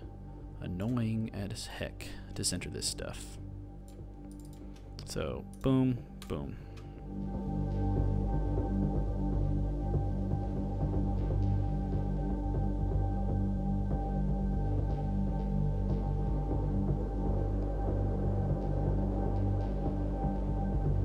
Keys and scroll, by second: 8.2 super+d, 9.1-10.4 typing, 10.8 super+d, 11.9 super+v, 12.8 super+d, 14.0 super+v, 15.0 shift+a, 17.4 shift+super+c, 17.4 super+v, 17.8-19.6 typing, 19.1 shift+super+c, 19.1 super+v, 20.8 super+v.